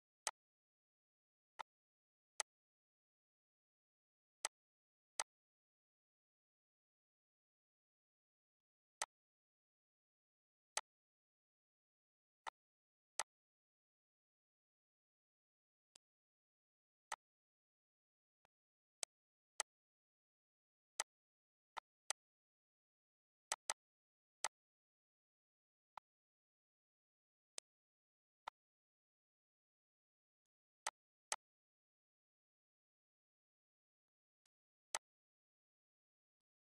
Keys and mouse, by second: 0.3 click, 1.2 ctrl+d, 2.0 click, 3.7 click, 4.4 click, 6.3 click, 7.1 click, 8.3 click, 9.3 click, 10.4 click, 11.0 click, 12.4 click, 14.4 click, 15.9 click, 16.7 click, 18.4 click, 21.4 click, 23.3 click, 24.3 click, 35.2 click, 36.3 click.